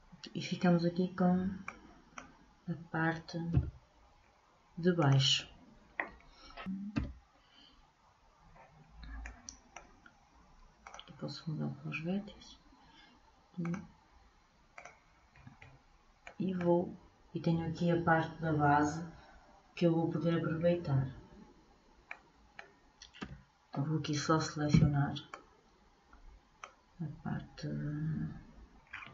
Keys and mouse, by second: 1.8 click, 9.4-11.0 middle drag, 11.0-12.5 drag, 13.8 click, 28.7 middle click.